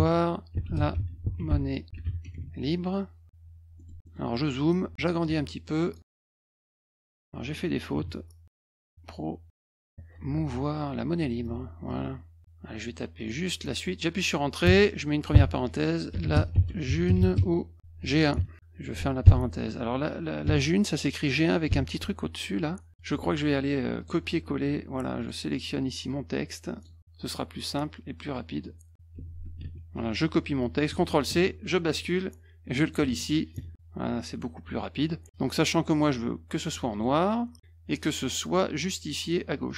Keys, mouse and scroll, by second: 0.0-2.4 typing, 3.4 F1, 3.7 middle click, 4.0 middle click, 4.8 F1, 5.2 click, 6.1 click, 6.6-8.4 typing, 7.0 middle click, 8.9 ctrl+z, 9.5 middle click, 10.1 u, 11.2 F1, 11.8 click, 13.1 click, 14.6 Return, 15.3-18.3 typing, 19.2 Menu, 20.4 BackSpace, 22.9 ctrl+a, 23.2 alt+Tab, 24.0 click, 25.2 click, 26.7 click, 29.6 ctrl+a, 30.9 ctrl+c, 31.3 alt+Tab, 32.8 click, 33.0 ctrl+a, 33.7 ctrl+v, 36.9 click, 38.4 click, 39.6 click.